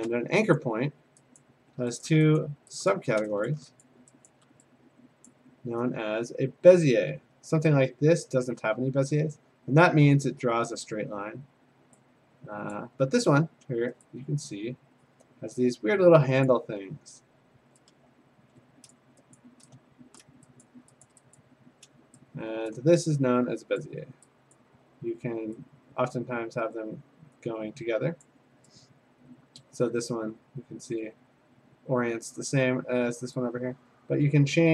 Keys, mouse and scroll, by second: 0.6 click, 1.4 click, 2.0 shift+click, 2.4 click, 3.0 click, 3.5 shift+click, 3.8 click, 4.3 ctrl+click, 5.3 click, 7.6 click, 9.3-12.5 drag, 12.7-15.8 drag, 16.5 click, 18.9 click, 19.4 click, 20.2 shift+click, 20.6 click, 21.1 ctrl+click, 21.4 click, 22.7 ctrl+click, 23.8 click, 24.8 click, 28.2 click, 32.3 click.